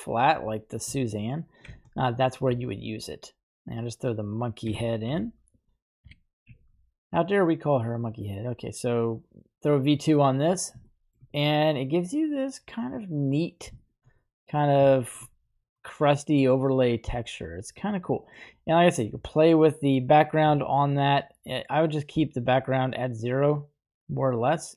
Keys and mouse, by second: 1.7 shift+a, 4.7 g, 5.2 z, 5.6 click, 6.3 r, 7.0 z, 7.3 click, 9.4 click, 10.9 shift+middle click, 11.4-13.4 middle drag, 13.9 shift+middle drag, 14.2-14.7 middle drag, 15.0 shift+middle drag, 16.0 middle click, 17.3-18.5 middle drag, 20.9-24.7 shift+drag.